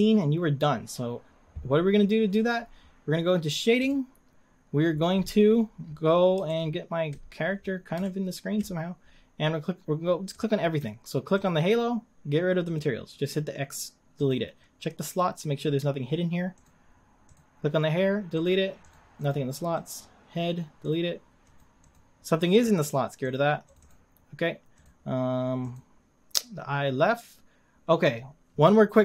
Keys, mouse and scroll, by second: 3.8 click, 4.9-5.8 scroll down 16, 5.8-6.3 scroll up 5, 6.6-7.2 shift+middle drag, 7.4-7.9 scroll up 4, 8.1-8.8 shift+middle drag, 9.1 scroll up 2, 10.3-11.4 middle drag, 11.4 click, 12.8-17.4 drag, 18.5-19.8 drag, 20.9-24.9 drag, 25.8 click.